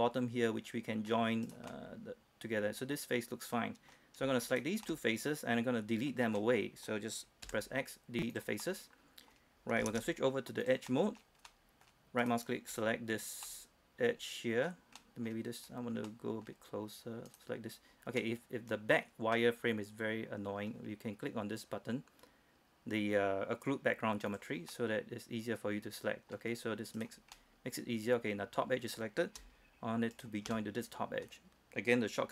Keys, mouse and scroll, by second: 0.1-1.7 middle drag, 1.7 right click, 1.9-4.2 middle drag, 4.2 scroll up 1, 4.7 shift+right click, 5.1-6.4 shift+middle drag, 6.4 scroll down 1, 6.6 middle click, 7.1-7.7 scroll up 1, 7.7 x, 8.6 click, 8.9 middle click, 10.1 ctrl+Tab, 10.9 click, 11.1 middle click, 12.4 right click, 13.7-15.9 middle drag, 15.9-16.2 scroll up 1, 16.2 scroll down 1, 16.4-21.5 middle drag, 24.5 click, 25.0-26.6 middle drag, 27.2 right click, 27.6-29.6 middle drag, 30.4 shift+right click, 30.8-32.3 middle drag.